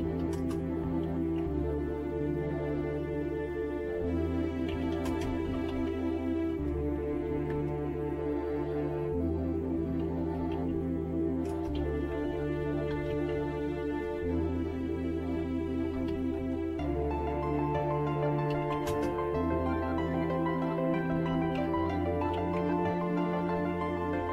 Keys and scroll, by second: 0.0-1.0 typing, 2.7-7.6 typing, 6.5 Return, 9.5-13.9 typing, 15.8-16.6 typing, 18.3-19.7 typing, 20.8-22.7 typing.